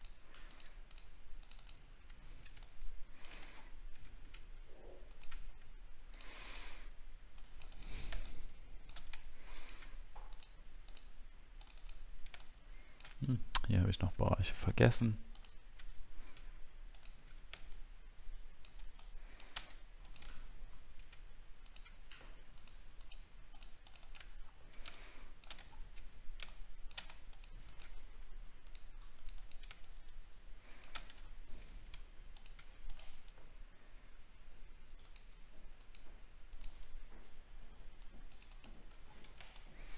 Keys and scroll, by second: 2.2-2.9 alt+scroll down 1, 3.6 alt+scroll down 6, 20.3 alt+scroll up 1, 24.3-24.6 alt+scroll down 1, 25.6-26.5 alt+scroll down 8, 31.2 alt+scroll up 1, 39.0 alt+scroll down 1.